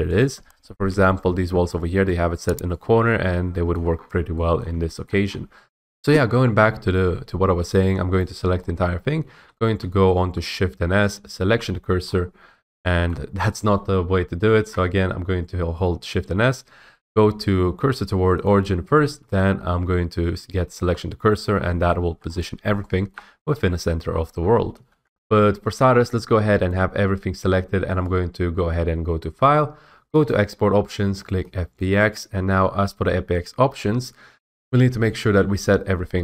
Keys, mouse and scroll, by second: 0.3 click, 0.9 ., 1.7 scroll, 2.1 middle click, 2.6 middle click, 3.8 middle click, 4.0 middle click, 4.0 middle click, 4.2 middle click, 4.7 middle click, 5.1 shift+middle click, 5.3 scroll, 5.8 middle click, 6.2-7.3 scroll, 8.3 click, 8.6 scroll, 9.3-11.6 typing, 12.1 scroll, 13.2 scroll, 14.5 ctrl+z, 16.1 s, 18.5 click, 19.3 s, 19.8-21.0 s, 21.6 scroll, 22.3 scroll, 23.2 scroll, 24.1-24.7 scroll, 24.8 ctrl+z, 26.0 click, 26.6 click, 28.0 click, 30.2 click, 31.7 click, 34.4 F8.